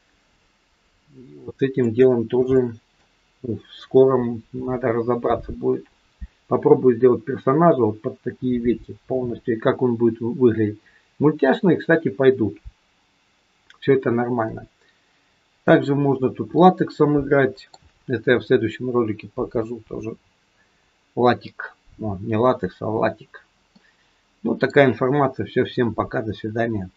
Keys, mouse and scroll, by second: 2.1-2.5 scroll down 3, 2.5 shift+middle click, 3.3-5.2 scroll up 1, 15.5-15.9 scroll up 2, 15.9-16.5 scroll down 3, 16.5 middle click, 23.7 middle click.